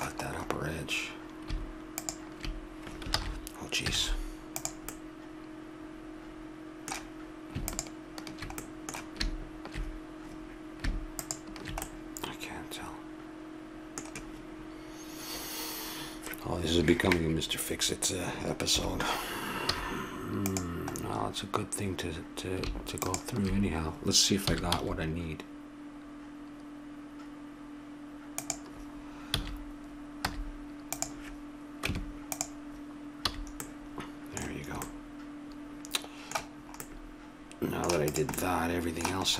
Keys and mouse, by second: 1.9-3.1 drag, 3.1 ctrl+z, 3.9 z, 4.9-6.7 middle drag, 7.6-9.5 drag, 8.6-11.2 middle drag, 11.2-13.0 drag, 11.8 middle click, 18.7 KP_7, 19.7 z, 20.5 z, 20.9-22.9 middle drag, 23.0 click, 24.4 s, 29.3 a, 30.3 z, 31.9 Tab, 33.3 a, 33.7 middle click, 36.6-39.0 middle drag, 38.1 click.